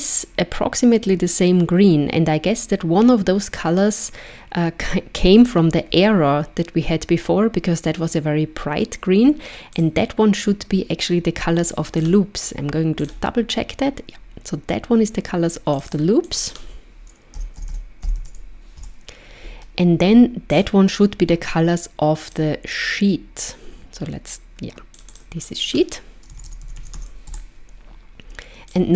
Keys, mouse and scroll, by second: 9.8 click, 12.1 click, 15.8 click, 15.9 click, 17.7 o, 20.6 click, 22.3 click, 25.0 click, 25.1 click, 26.8 e, 28.7 click.